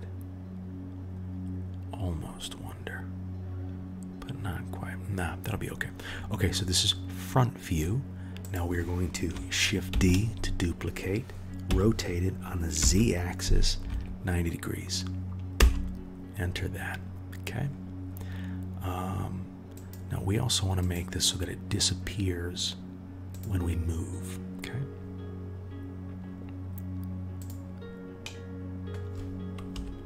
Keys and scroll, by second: 9.9 shift+d, 29.7 KP_1.